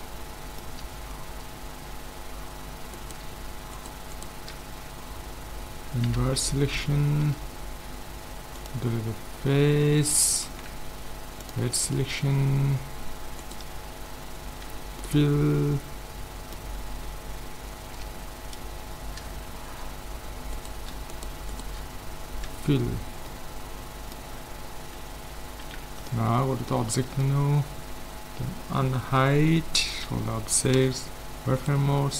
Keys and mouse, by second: 0.1 middle click, 3.0-4.6 right drag, 4.6 middle click, 4.7-5.8 right drag, 5.8 middle click, 6.1 ctrl+i, 7.2 x, 9.8-11.9 middle drag, 10.5 ctrl+Tab, 12.1-13.4 middle drag, 13.4 right click, 14.7 f, 15.1 middle click, 19.4-20.6 middle drag, 20.6-22.8 right drag, 22.5 f, 22.8 middle click, 24.9 Tab, 25.7 ctrl+s, 29.2 alt+h, 30.0 a, 30.7 z, 31.6-32.1 right drag.